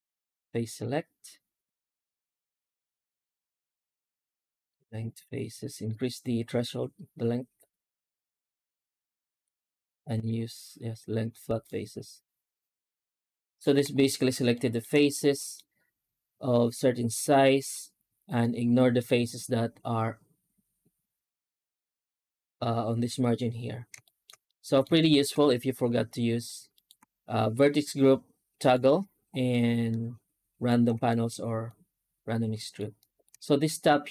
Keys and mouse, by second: 14.4 shift+middle click, 15.1 middle click, 18.3 middle click, 23.9 shift+middle click, 24.3 middle click, 24.9 shift+middle click, 26.6 alt+middle click, 27.4-28.6 middle drag, 29.4-30.5 middle drag, 30.9 shift+middle click, 31.5-32.6 middle drag, 32.8 shift+middle click.